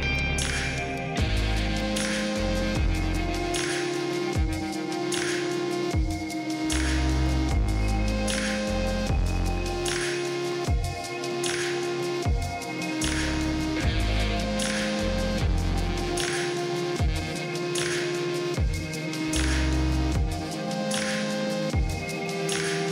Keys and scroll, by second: 4.5 ctrl+d, 4.7 space, 5.2 space, 5.5 space, 6.5 space, 8.2 space.